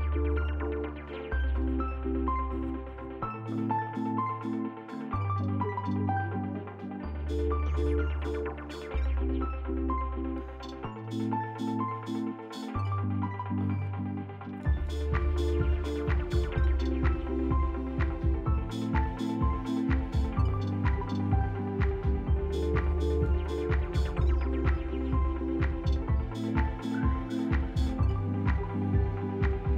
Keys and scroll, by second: 1.7 F4, 7.2 shift+s, 8.3 s, 10.3 shift+s, 15.8 shift+s, 16.4 s, 17.5 shift+s, 18.2 s, 18.8 s, 20.1 s, 20.4 s, 21.2 s, 26.2 s.